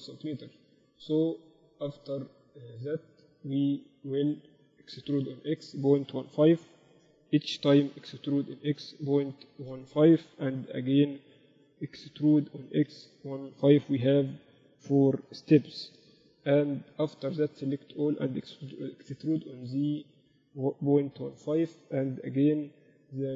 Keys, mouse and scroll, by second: 1.0-5.3 middle drag, 5.3 e, 8.3 e, 10.8 e, 14.3 e, 17.5 a, 17.7 a, 19.2 e, 22.7 KP_8, 22.9 KP_8, 23.1 KP_6.